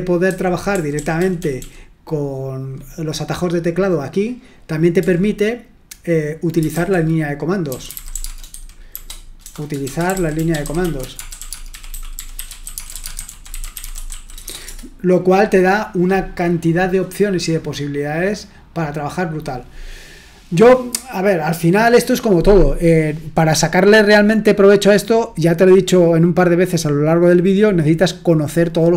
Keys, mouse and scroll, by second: 0.0-1.5 typing, 4.9 typing, 7.4-15.1 typing.